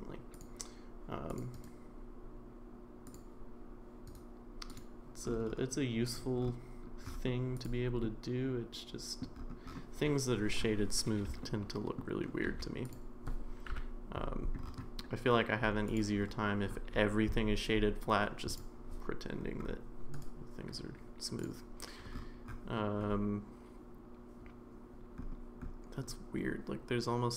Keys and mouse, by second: 1.5-3.1 right drag, 4.2-4.8 right drag, 6.1 drag, 8.1-9.2 middle drag, 11.4-12.0 shift+middle drag, 12.3 shift+middle drag, 13.7 KP_Decimal, 15.9 click, 20.2-21.4 right drag.